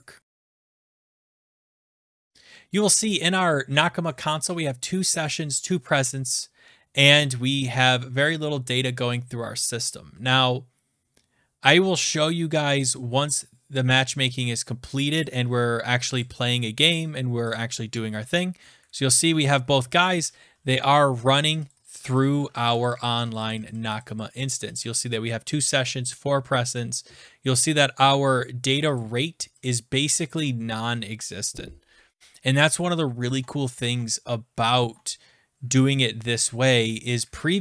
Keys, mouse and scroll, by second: 0.2 Return, 0.2 BackSpace, 2.1 shift+click, 6.9 scroll down 6, 7.2 click, 8.3 scroll down 1, 8.4 click, 8.5-9.5 scroll down 1, 9.5-11.9 scroll down 2, 14.1 click, 15.2 click, 16.2 click, 16.8 click, 17.5 click, 18.4 click, 19.2 click, 20.6 scroll down 1, 21.2-22.6 scroll down 24, 21.3 click, 21.5 click, 21.8 click, 22.0 click, 22.2 click, 22.4 click, 22.7 Down, 22.7 Up, 22.8 click, 23.0 click, 23.3 click, 23.5 click, 23.5 scroll up 1, 23.6 click, 23.7-24.2 scroll down 10, 23.8 click, 24.0 click, 24.2 click, 24.6 click, 24.6 scroll up 1, 24.7 click, 26.7 click, 28.9 click, 29.6 click, 31.7-32.0 scroll down 6, 32.7 scroll up 5, 33.3 alt+Tab, 33.8 alt+Tab, 34.7 scroll, 35.8 click, 36.4 click, 37.2 click, 37.3-37.6 scroll up 5.